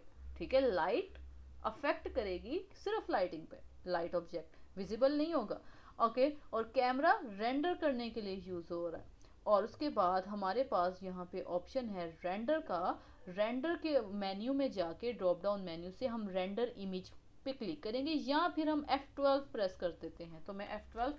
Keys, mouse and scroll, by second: 0.0 click, 0.3 click, 2.7-3.2 middle drag, 3.2-3.5 scroll up 1, 4.1-6.5 middle drag, 6.5 click, 8.4 scroll down 4, 8.8-9.5 middle drag, 9.5-9.9 scroll up 1, 9.9-12.7 middle drag, 12.7-15.8 drag.